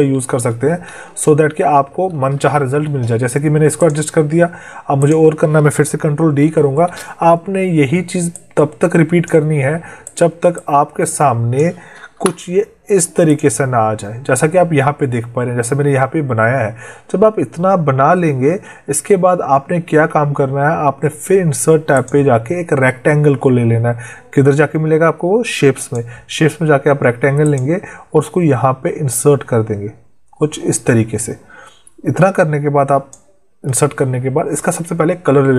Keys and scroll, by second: 0.0 ctrl+Left, 0.8 ctrl+Down, 6.4 ctrl+d, 12.0 Delete.